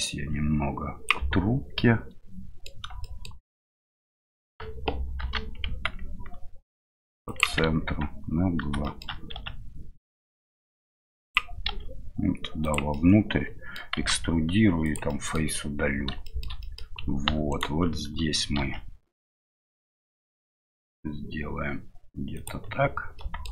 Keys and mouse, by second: 0.1-1.7 drag, 1.7-2.7 middle drag, 3.6 middle click, 5.2 g, 7.7 Tab, 8.8 shift+middle click, 9.3 s, 13.0 middle click, 15.1 middle click, 16.2 middle click, 16.6 middle click, 18.6 ctrl+b, 23.3 click.